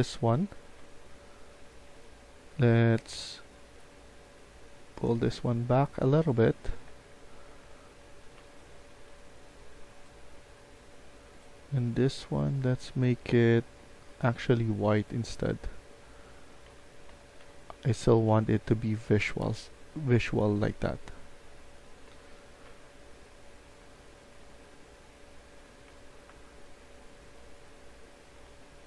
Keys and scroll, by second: 0.0-1.0 typing, 5.1-9.4 typing, 16.5 Escape, 16.8-22.0 typing, 23.4-28.8 typing.